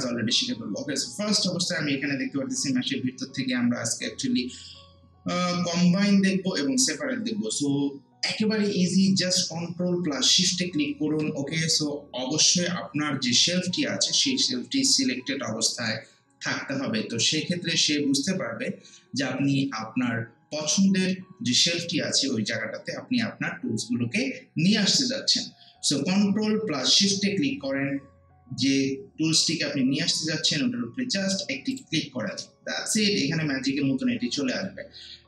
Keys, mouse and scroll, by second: 31.7 ctrl+shift+click.